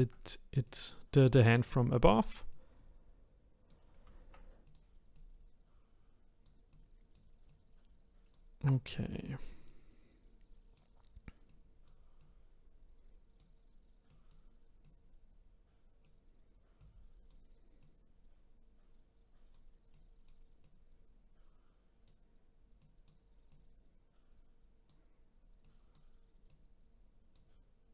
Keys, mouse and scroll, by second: 0.6 click, 2.5 click, 4.6 click, 5.1 click, 6.7 click, 8.7-11.5 drag, 12.2 click, 14.1-16.9 drag, 17.8 click, 19.9 click, 22.8 click, 25.6 click, 26.5 click.